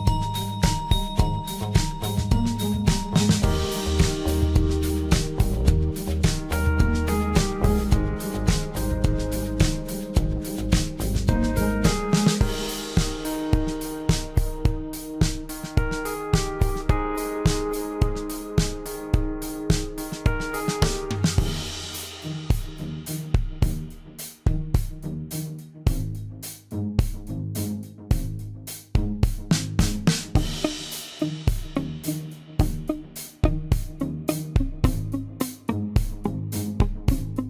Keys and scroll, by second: 19.0 m, 19.7 i.